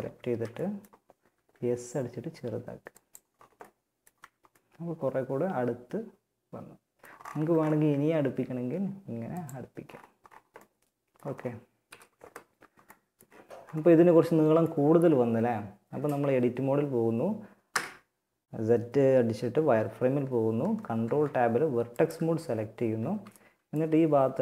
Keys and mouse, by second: 0.5 s, 3.4 Tab, 6.5 Tab, 7.4 s, 8.7 Tab, 11.1 KP_1, 14.5 Tab, 15.2 Tab, 15.4 Tab, 16.9 z, 20.0 ctrl+Tab, 22.2 a, 22.5 b.